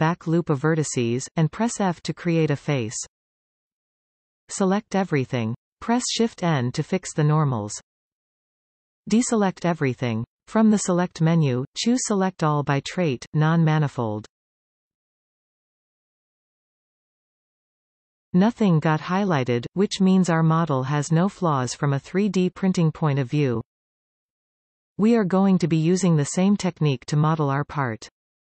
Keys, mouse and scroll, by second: 0.6 alt+shift+click, 1.5 f, 2.0-2.3 scroll down 2, 2.3-4.9 middle drag, 4.9 a, 6.8 shift+n, 10.1 alt+a, 14.1-17.1 drag, 18.1-22.5 middle drag, 23.1-23.4 scroll down 1, 23.4-23.9 scroll up 3, 24.1 scroll down 2, 25.2 Tab.